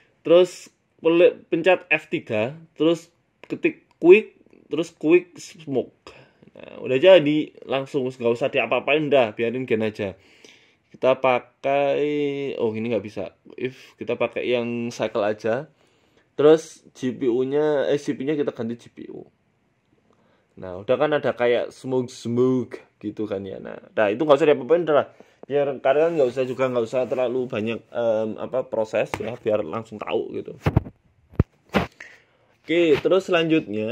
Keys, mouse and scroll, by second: 0.5 F3, 6.5 middle click, 6.8 scroll down 2, 7.1 middle click, 7.7 z, 9.2 click, 9.9 click, 10.4 click, 11.0 click, 11.2 click, 12.2 click, 12.4 click, 12.8 middle click, 13.7 click, 18.5 click, 21.1 scroll down 10, 22.2 z, 23.1-23.4 scroll up 5, 23.5 shift+middle click, 23.8 middle click, 24.4 shift+middle click, 24.9 right click, 25.4 middle click, 27.1 click.